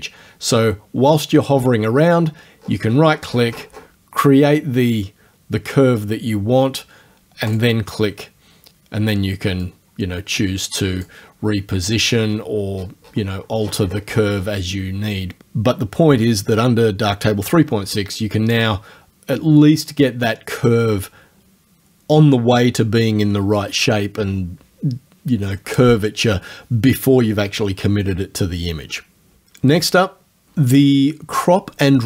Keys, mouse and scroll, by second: 3.2-4.0 scroll down 1, 7.5 click, 9.7-11.2 drag, 12.3-13.6 scroll up 2, 13.6-14.6 scroll down 1, 19.8 right click.